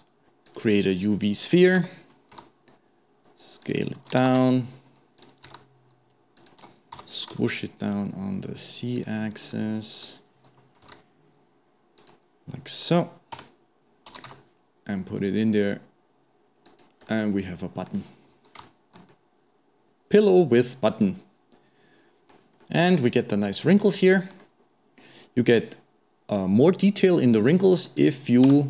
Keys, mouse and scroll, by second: 1.8 Tab, 9.5-10.8 middle drag, 10.8 s, 17.1-22.3 middle drag, 22.6-24.6 middle drag, 24.6-27.4 scroll up 2, 27.4-28.0 middle drag, 28.0 click.